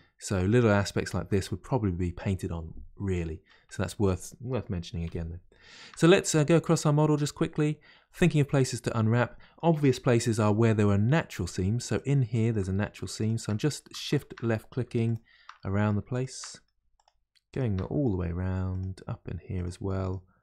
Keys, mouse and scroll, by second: 2.9-3.7 middle drag, 3.7-4.5 scroll down 1, 5.5 scroll down 1, 5.6-6.3 shift+middle drag, 6.3 click, 6.7 Tab, 7.1 middle click, 7.7-8.2 scroll up 1, 8.2-10.4 middle drag, 10.4 2, 10.9-11.9 middle drag, 11.9 click, 12.5 shift+click, 13.2 shift+click, 13.5 middle click, 14.1 shift+click, 14.4 middle click, 15.1 shift+click, 15.5 middle click, 16.1 shift+click, 16.5 middle click, 16.9 shift+click, 17.5 shift+click, 17.8 middle click, 18.7 shift+click, 19.5 shift+click, 20.0 shift+click.